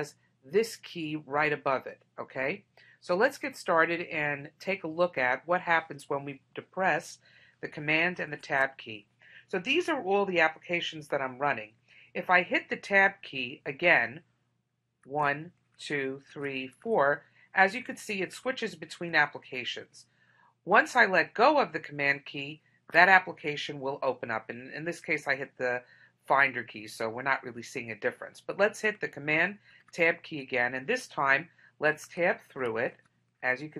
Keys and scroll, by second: 8.4 super+Tab, 29.7 super+Tab.